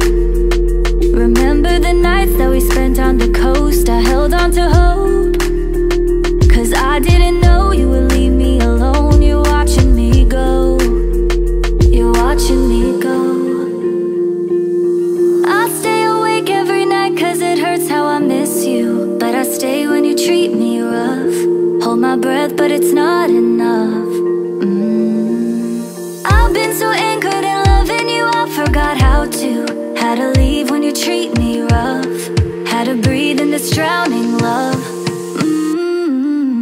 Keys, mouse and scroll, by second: 2.7 double click, 3.4 right click, 9.1 double click, 22.6 ctrl+click, 24.6 double click, 26.8 ctrl+click, 30.9 double click.